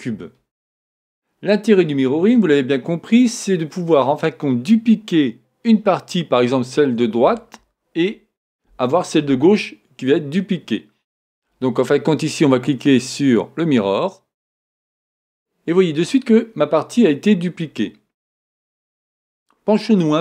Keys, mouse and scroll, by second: 12.6-14.5 drag.